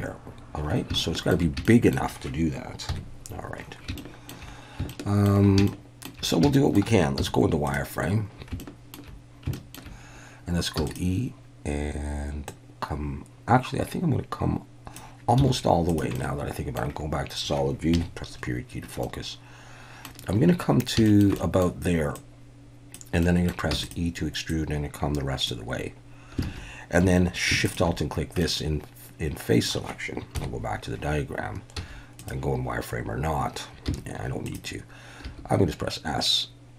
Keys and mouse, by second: 1.0 shift+middle click, 1.6 shift+middle click, 2.9 KP_1, 4.0 shift+middle click, 4.9 shift+middle click, 5.7-6.1 shift+middle drag, 6.5 shift+middle click, 7.2 z, 8.6 shift+middle click, 9.5 shift+middle click, 10.8 e, 10.9-11.7 drag, 12.6-15.0 drag, 15.4 z, 16.1 middle click, 17.9 KP_Decimal, 19.0-20.0 middle drag, 21.0 shift+middle click, 21.4 middle click, 22.2 click, 23.2 middle click, 23.7 e, 23.8 click, 24.5 click, 26.4 alt+a, 27.0 3, 28.4-29.7 middle drag, 30.4 KP_1, 31.8 z, 33.9 z, 35.2 s.